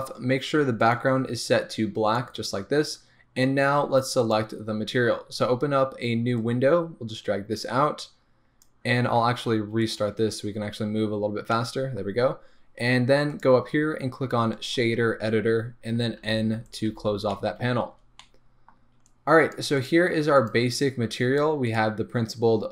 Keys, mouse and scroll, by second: 1.8 click, 6.7-11.0 drag, 11.0 scroll down 1, 11.2 scroll up 1, 11.5-21.8 middle drag, 12.0-15.4 scroll up 1, 21.8 click.